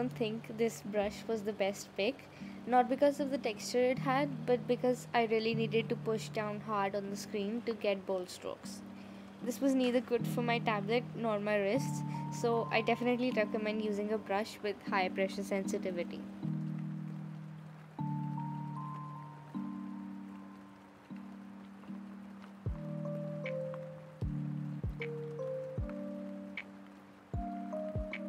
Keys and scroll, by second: 0.7 z, 2.0 z, 13.4 z, 14.4 space, 17.4 z, 17.8 space, 19.6 z, 19.8 space, 21.1 ctrl+z, 22.2 ctrl+z, 24.3 ctrl+z.